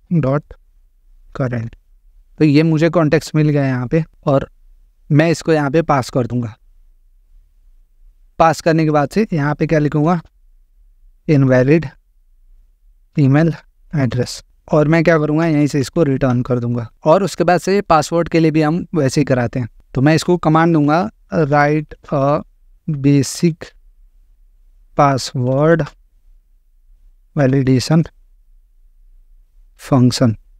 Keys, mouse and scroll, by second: 0.0-1.0 typing, 1.5 Down, 1.7 Down, 2.0 Return, 4.1-4.4 scroll, 6.3 click, 7.0 ctrl+v, 8.9 click, 9.8-16.9 typing, 14.6 click, 19.8 click, 20.6-28.7 typing.